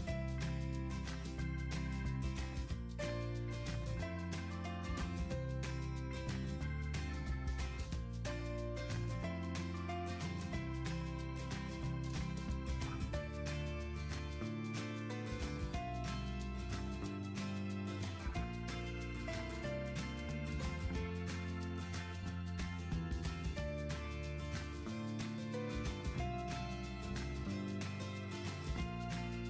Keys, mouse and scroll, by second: 1.8 click, 4.2 click, 4.5 middle click, 4.9 middle click, 5.5 middle click, 5.7 click, 7.7 typing, 8.2 click, 9.4 click, 11.1 click, 13.7 right click, 14.6 click, 15.3 click, 16.0 middle click, 17.3 middle click, 17.3 middle click, 17.8 middle click, 18.0 middle click, 18.2-18.7 scroll, 19.3 scroll, 20.3-21.5 scroll, 22.0-22.4 scroll, 26.0-27.0 scroll, 27.2-28.0 scroll, 28.7 right click.